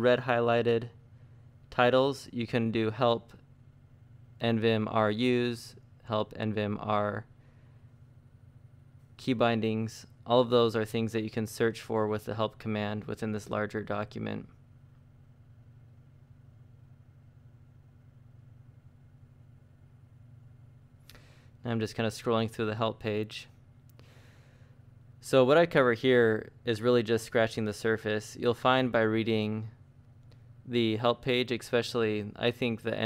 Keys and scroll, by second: 0.5 Escape, 1.3-4.9 typing, 6.1 space, 7.7 BackSpace, 7.8 BackSpace, 8.6 shift+r, 9.3 -, 12.1 u, 12.2 space, 15.9 shift+;, 16.4 Up, 17.5-18.3 typing, 20.9 ctrl+d, 21.8 ctrl+d, 22.7 ctrl+d, 23.4 ctrl+d, 23.9 ctrl+d, 24.8 ctrl+d, 28.5 shift+:, 29.2 Up, 29.6-31.8 typing.